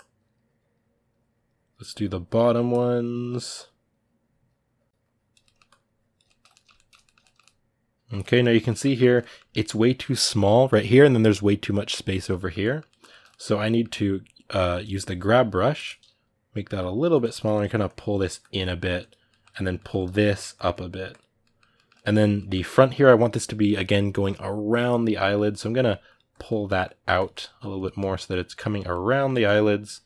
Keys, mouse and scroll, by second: 2.2 ctrl+middle click, 2.5-5.2 drag, 5.2 ctrl+middle click, 5.4 click, 6.0-14.6 ctrl+middle drag, 14.6 g, 14.8 g, 16.4 f, 17.1 ctrl+middle click, 17.7-19.1 drag, 19.1-20.3 middle drag, 20.3 click, 21.2-25.5 middle drag, 25.5 click, 26.4 middle click, 26.8 click, 27.7 middle click, 28.1 click, 28.5-29.9 middle drag, 29.9 click.